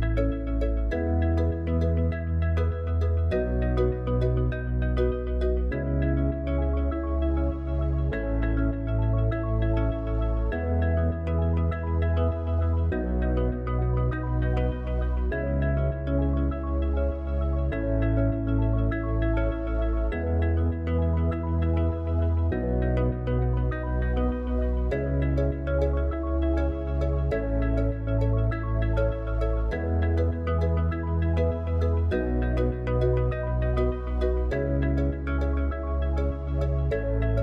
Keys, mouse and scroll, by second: 1.1 click, 10.0 KP_0, 13.6 KP_1, 14.7-15.3 scroll down 4, 16.3 click, 19.1 KP_7, 20.3-21.5 scroll up 3, 21.5 g, 23.9 KP_0, 27.9 click, 29.5 click, 33.8 click.